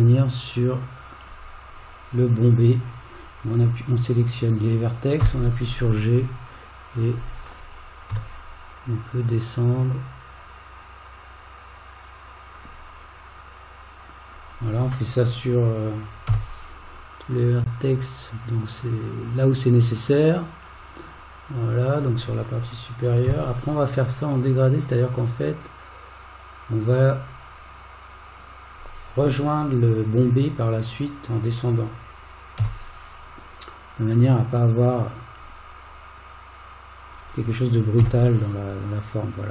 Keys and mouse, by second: 0.2-1.3 drag, 5.2 g, 13.4 click, 16.3 g, 21.4 click, 23.2 g, 28.2 click, 32.6 g, 36.3 click, 38.0 g.